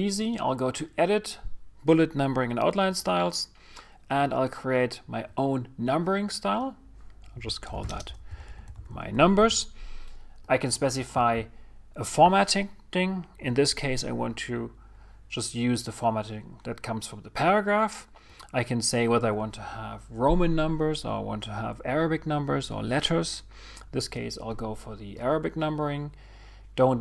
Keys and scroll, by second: 9.7 shift+m.